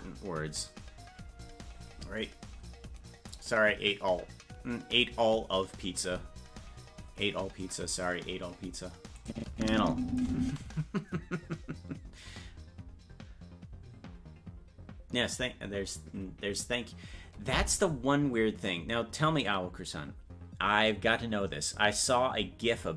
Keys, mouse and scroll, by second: 9.2 click, 9.5 space.